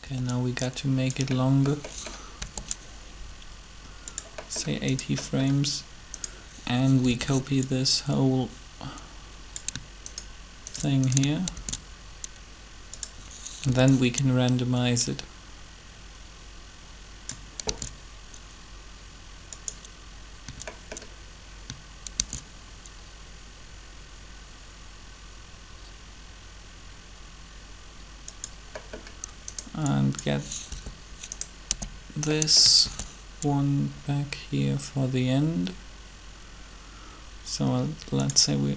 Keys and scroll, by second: 0.0 b, 2.4 g, 7.0 b, 11.5 shift+d, 13.7 b, 17.7 shift+d, 22.2 shift+d, 30.6 b, 31.6 k, 32.8 shift+d.